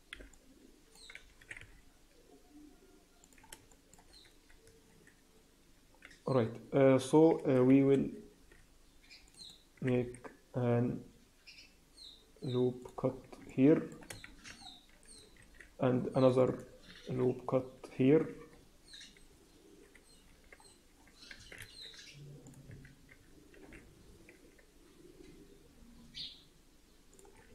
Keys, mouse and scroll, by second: 0.0 b, 1.3 s, 3.6 shift+middle click, 4.1 scroll up 2, 5.9-6.7 scroll down 3, 6.8 scroll up 2, 8.3 ctrl+r, 9.7 s, 13.0-13.4 scroll down 4, 13.4 alt+middle click, 14.2 shift+z, 14.5-15.1 scroll up 5, 15.3 ctrl+r, 16.9 ctrl+b, 20.5-20.9 scroll down 4, 20.9-21.3 scroll up 3, 21.3 Tab, 21.5 ctrl+a, 22.6 Tab, 23.5 ctrl+b, 27.3 scroll down 3, 27.4 Tab.